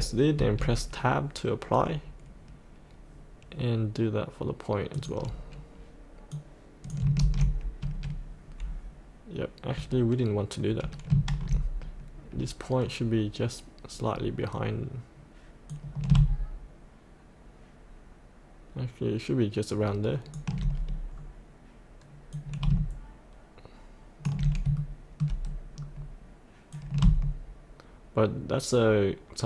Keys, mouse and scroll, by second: 0.4 Tab, 5.0 click, 7.2 ctrl+v, 7.8 Tab, 11.2 ctrl+z, 14.1 scroll down 1, 15.7-20.7 drag, 21.0-22.3 scroll down 1, 22.3-24.4 drag, 24.4 scroll up 1, 24.8 shift+middle click, 25.7-26.5 scroll down 1, 26.7-29.4 drag.